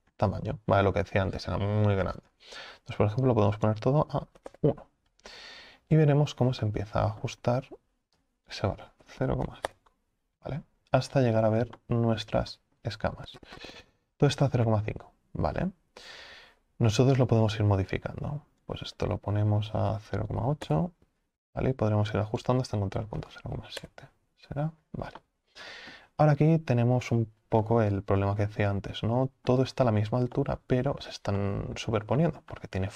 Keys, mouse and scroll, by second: 4.6-6.6 drag, 6.6-9.8 shift+middle drag, 9.8-11.0 drag, 11.0 scroll up 2, 11.8 shift+middle click, 12.4 scroll down 2, 20.7-25.2 drag, 25.2-26.3 middle drag, 26.3-27.0 scroll up 2, 27.0-27.6 scroll up 1, 27.6-32.9 middle drag.